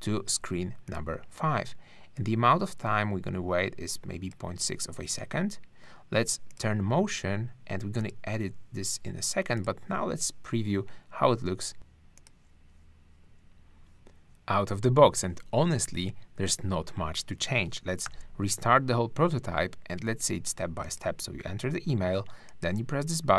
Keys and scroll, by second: 18.1 super+r.